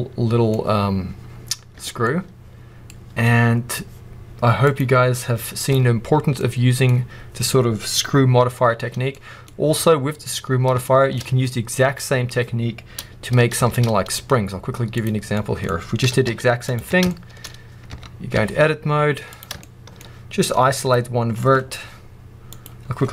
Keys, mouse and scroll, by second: 1.7 Tab, 1.7-4.6 middle drag, 2.8 scroll down 1, 4.6-6.3 drag, 6.3-15.9 middle drag, 8.8 scroll down 1, 13.6 shift+a, 15.9 g, 16.7 Tab, 17.0 shift+middle click, 17.3 middle click, 17.4 scroll up 1, 17.8 Tab, 19.2 click, 19.6 shift+middle click, 19.9-20.7 scroll up 1, 20.7 click, 22.4 click.